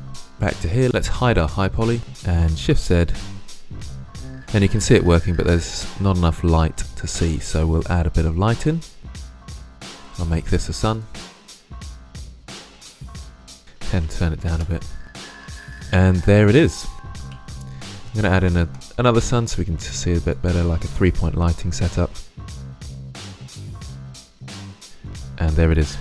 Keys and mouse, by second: 0.0 shift+space, 2.0 Tab, 2.0 shift+space, 2.4 shift+z, 6.9 shift+space, 9.4 right drag, 10.7-11.6 right drag, 11.8 click, 12.0 middle drag, 12.8 shift+z, 15.0-16.0 middle drag, 17.1 middle click, 17.1 shift+z, 19.8 shift+d, 22.3 middle drag, 22.5-24.4 typing, 22.7-23.0 drag, 24.0 click.